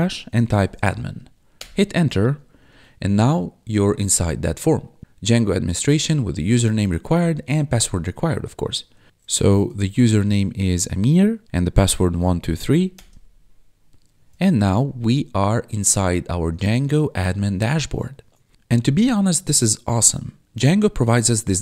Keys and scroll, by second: 0.0-1.1 typing, 1.6 Return, 2.8 4, 9.1-10.4 typing, 10.4 Tab, 11.8-13.0 typing.